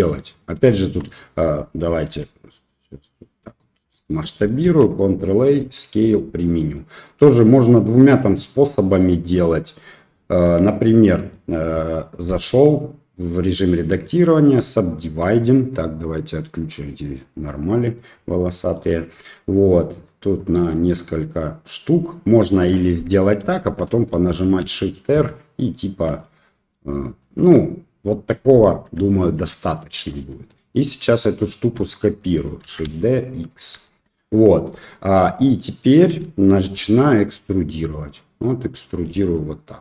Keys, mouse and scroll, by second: 0.7 shift+middle click, 2.1 s, 4.6 ctrl+a, 6.4 middle click, 7.5 click, 8.1 middle click, 10.4 Tab, 11.0 middle click, 12.3 w, 14.8 middle click, 16.0-17.5 drag, 17.7 middle click, 18.4 middle click, 20.4-21.9 drag, 22.3 middle click, 23.8 shift+r, 24.2 shift+r, 24.6 shift+r, 25.1 shift+r, 26.1-26.7 middle drag, 27.1-28.3 middle drag, 29.0 shift+middle drag, 30.1 Tab, 30.4 middle drag, 31.1 click, 31.8 shift+middle click, 32.6 shift+d, 33.8 shift+middle click, 34.7 Tab, 35.0 middle click, 36.7 e, 39.2 middle click.